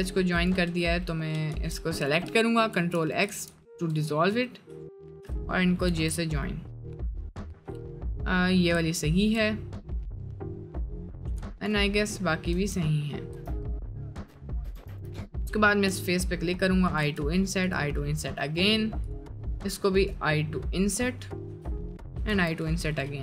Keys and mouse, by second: 1.5 2, 2.9 ctrl+x, 3.4 ctrl+x, 3.8 1, 6.1 j, 6.2 middle click, 6.7 middle click, 7.1 middle click, 9.0 shift+middle click, 9.4 middle click, 10.2 middle click, 12.1 middle click, 12.7 Tab, 12.8 middle click, 13.3 Tab, 13.6 middle click, 14.4 shift+middle click, 14.7 3, 15.2 middle click, 16.0 i, 17.2 i, 18.1 middle click, 19.4 middle click, 20.5 middle click, 20.9 middle click, 21.6 i, 22.4 i.